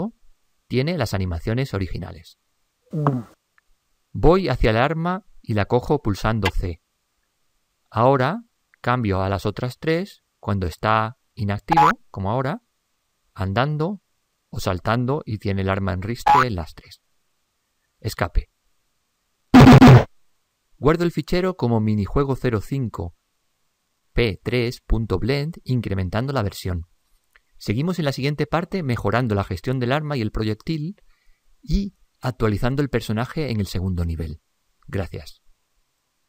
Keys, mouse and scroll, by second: 21.7-22.6 drag, 30.6-32.3 drag.